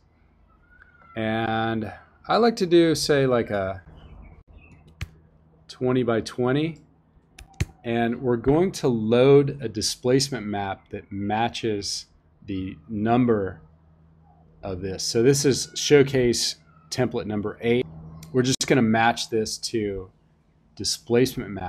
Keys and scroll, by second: 4.6 2, 4.9 0, 7.0-8.0 typing.